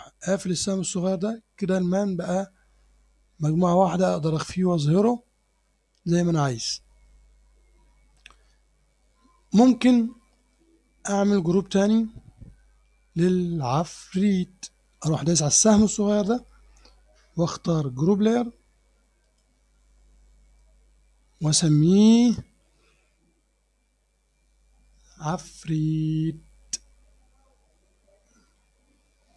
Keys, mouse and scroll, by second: 0.4 click, 3.5 click, 4.3 click, 4.8 click, 10.0 scroll down 1, 10.5 middle click, 11.7 middle click, 12.2 click, 16.2 click, 19.3 click, 21.5 click.